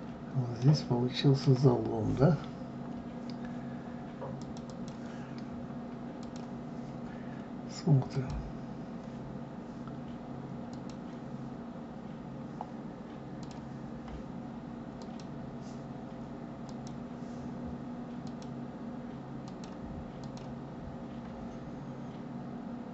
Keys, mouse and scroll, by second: 0.5-3.6 middle drag, 4.4 click, 6.2 click, 8.0 click, 9.4-10.4 scroll up 1, 10.7-11.7 drag, 11.7-12.2 scroll up 1, 12.2-13.4 scroll down 1, 13.4 click, 15.0 click, 16.6 click, 18.2 click, 19.4 click, 20.1 click.